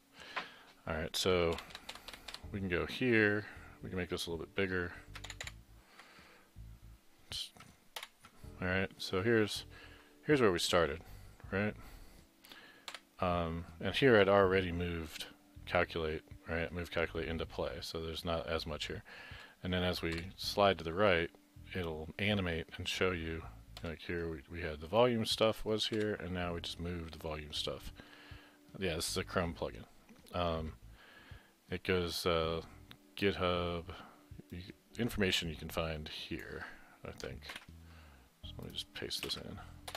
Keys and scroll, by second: 1.7 Left, 5.3 ctrl+=, 8.0 ctrl+=, 37.5 ctrl+c, 39.2 ctrl+v, 39.9 ctrl+c.